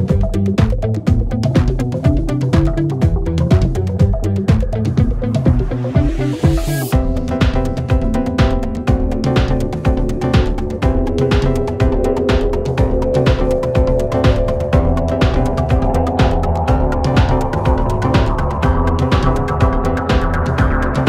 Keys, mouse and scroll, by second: 0.1-3.9 right drag, 3.9 click, 4.3-5.2 right drag, 5.2-6.0 scroll up 5, 6.0-7.1 scroll down 5, 7.1-8.0 scroll down 1, 8.0-11.0 drag, 11.1-12.9 scroll up 3, 12.9-14.7 drag, 15.3-19.1 drag.